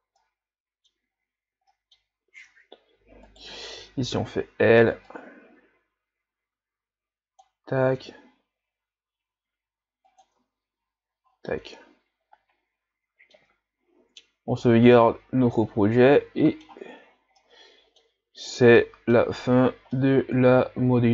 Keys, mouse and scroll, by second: 0.2-1.2 middle drag, 1.2-1.7 scroll up 3, 1.7 middle click, 2.1 scroll up 1, 2.4 Tab, 3.3 right click, 3.7 l, 5.1-7.9 drag, 7.9 s, 10.4 Tab, 11.5-14.0 middle drag, 14.0 ctrl+s, 14.7 scroll down 2, 15.0-17.0 middle drag, 17.0-17.4 scroll down 3, 17.4-18.2 middle drag, 18.2-18.6 scroll up 4, 18.8-19.4 middle drag, 20.0-21.1 middle drag.